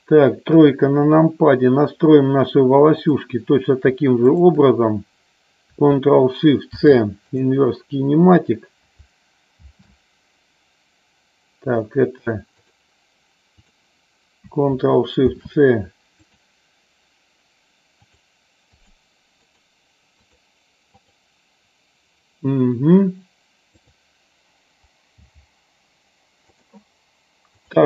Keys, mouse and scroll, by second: 0.6 KP_3, 3.0 click, 6.7 ctrl+shift+c, 9.6 ctrl+shift+c, 13.6 click, 15.3 ctrl+shift+c, 18.1 click, 18.7 click, 19.4 click, 21.0 click, 23.9 click, 25.2 g, 26.6 click.